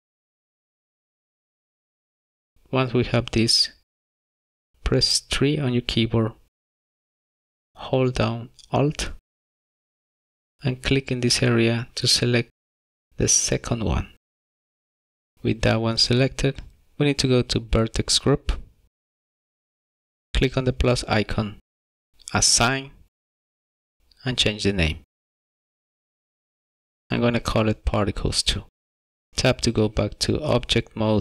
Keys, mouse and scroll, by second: 1.6 middle click, 4.2-4.7 scroll up 2, 8.2 3, 11.1 alt+click, 12.1 alt+click, 13.5-14.4 scroll down 2, 14.4 middle click, 19.5 click, 21.2 click, 22.8 click, 24.8 click, 24.9 click, 29.3 click, 29.6 Tab.